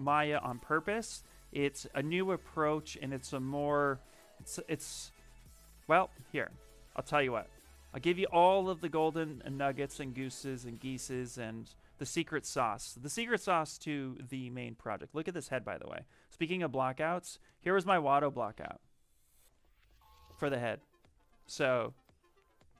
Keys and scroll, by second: 16.7 shift+f.